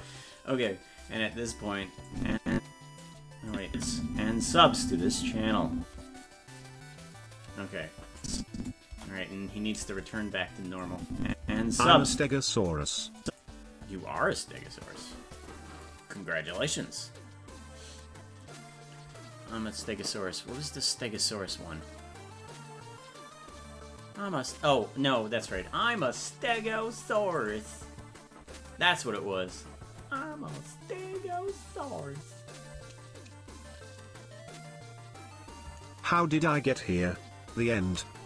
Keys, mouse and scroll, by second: 2.1 click, 3.5 click, 3.7 space, 8.2 click, 8.9 KP_0, 10.2 right click, 10.8 click, 11.4 space, 13.2 click, 27.6 right click, 36.2-37.5 shift+drag.